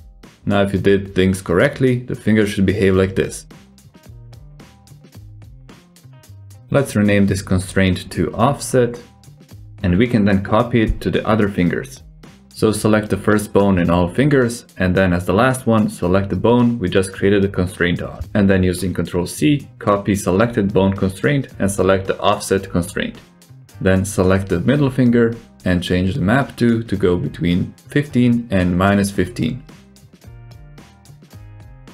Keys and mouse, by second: 0.3 alt+z, 0.5-0.8 drag, 0.8 middle drag, 1.3 r, 6.6 alt+z, 6.8-7.2 drag, 7.5 click, 9.0-11.7 drag, 10.3 f, 12.5 click, 13.1-13.5 middle drag, 14.1 click, 14.5 shift+click, 14.9 shift+click, 16.0 shift+click, 16.4 click, 17.0 ctrl+c, 23.9 click, 27.6-31.2 drag.